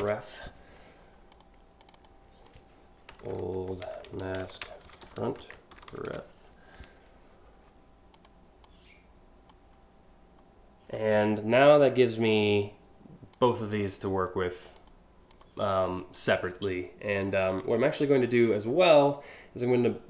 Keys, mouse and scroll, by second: 0.0-0.1 typing, 0.9 click, 1.4 click, 2.6-5.8 typing, 7.7 click, 8.2 click, 13.0 click, 13.4 click, 14.4 click, 14.9 click, 15.8 click, 17.1 click, 18.2-20.0 drag.